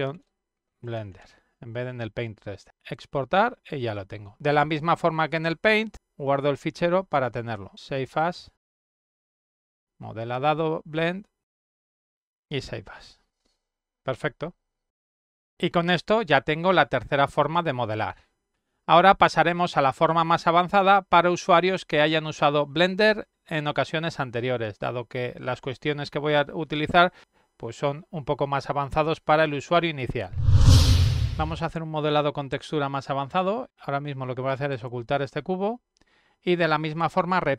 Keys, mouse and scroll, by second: 0.4-2.7 typing, 3.2 click, 3.5 click, 6.3 click, 10.3 click, 10.5 click, 11.3 click, 11.8 click, 12.9-14.3 typing, 33.2 click, 34.7 click.